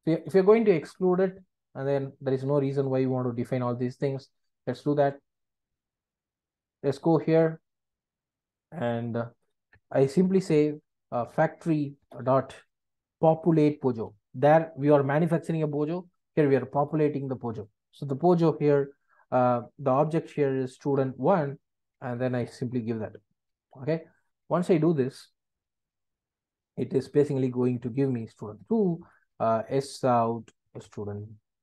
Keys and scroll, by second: 2.3 super+BackSpace, 5.8 ctrl+alt+o, 8.8 super+BackSpace, 12.0 Return, 16.7 Return, 22.4 Return, 26.2 alt+Return, 29.8 Return.